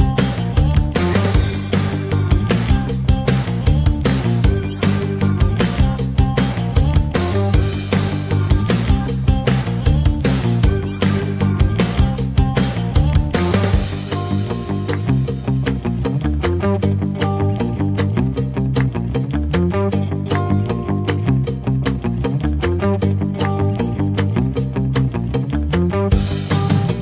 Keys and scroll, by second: 0.0 shift+Page_Up, 11.8 ctrl+z, 16.2 ctrl+z.